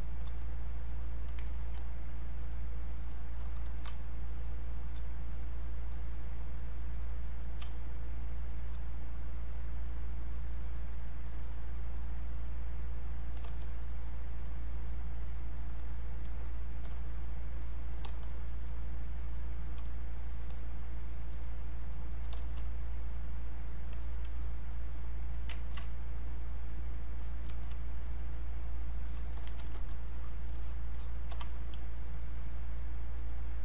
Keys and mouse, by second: 0.4 click, 1.4 alt+click, 3.9 space, 4.3 click, 4.4 space, 5.3 click, 7.7 space, 9.1-13.1 drag, 14.4 click, 16.4 shift+click, 18.7 click, 19.8 space, 20.2 click, 20.3 space, 20.5 click, 23.2 click, 24.0 alt+click, 25.6 ctrl+right click, 26.3 click, 28.4 click, 29.6 ctrl+shift+1, 30.0 click, 30.1-33.0 drag, 33.0 click.